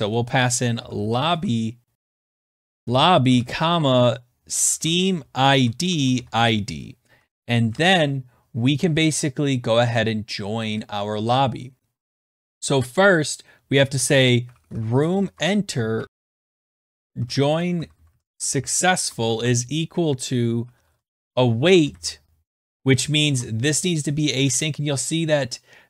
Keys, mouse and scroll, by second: 0.0-7.9 typing, 6.8 Right, 10.8-11.1 scroll, 11.9 scroll, 12.3 click, 13.6-19.1 typing, 13.9 middle click, 20.1-22.1 typing.